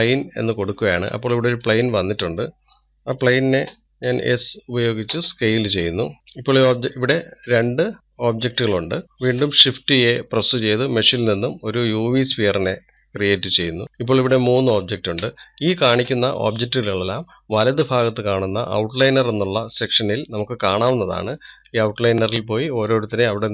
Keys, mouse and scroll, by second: 1.8-3.2 middle drag, 3.2 click, 6.7-7.7 middle drag, 7.7 click, 8.3 click, 9.0-10.1 scroll down 2, 12.8 shift+a, 13.8 click, 14.6-15.8 middle drag, 15.8-16.4 scroll up 2, 16.4-22.6 shift+middle drag, 22.6 click.